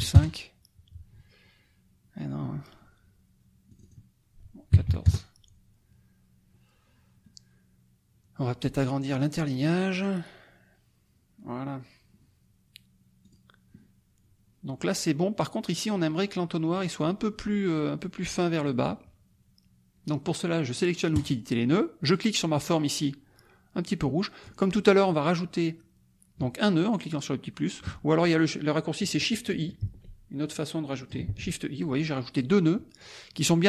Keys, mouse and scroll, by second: 0.1 KP_Enter, 3.7 click, 4.8 KP_1, 5.0 KP_Enter, 9.1 click, 9.9 click, 13.2 click, 16.7 click, 21.1 click, 22.0 click, 23.9 click, 29.8 shift+i, 30.5 click, 31.3 shift+i, 32.1 click.